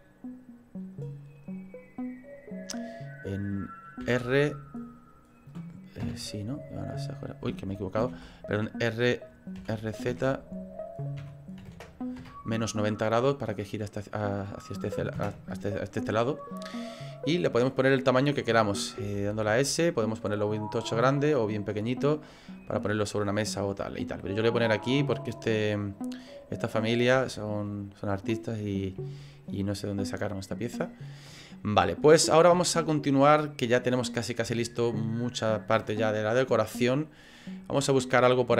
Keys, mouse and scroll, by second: 4.0 r, 8.1 ctrl+z, 9.6 r, 13.4 middle click, 15.1 KP_0, 18.3 click, 19.0 s, 26.6 right click, 27.6 shift+middle click, 32.7 shift+middle click.